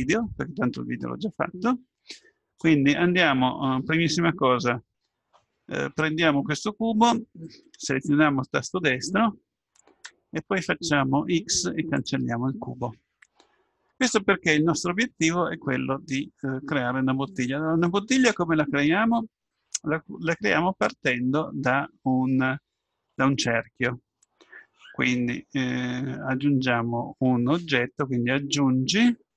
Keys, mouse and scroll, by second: 8.5-9.7 right drag, 10.7 x, 27.2 click.